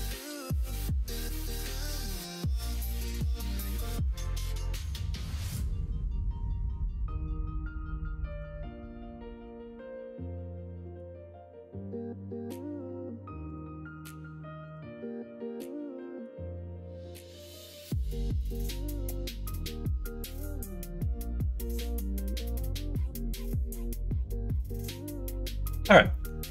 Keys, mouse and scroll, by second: 2.2-6.2 drag, 4.3 BackSpace, 7.0-12.7 drag, 13.5-16.8 drag, 17.4 middle click, 18.5 middle click, 19.4 click, 19.9 Tab, 20.4 click, 20.8-21.9 middle drag, 22.4 middle click, 23.5 middle click, 25.6 middle click, 26.0 middle click.